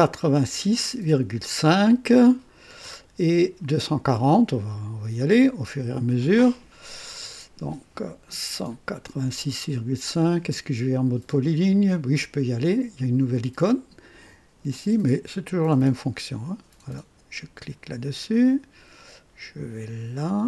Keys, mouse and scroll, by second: 5.4 click, 14.7 click, 17.5 click.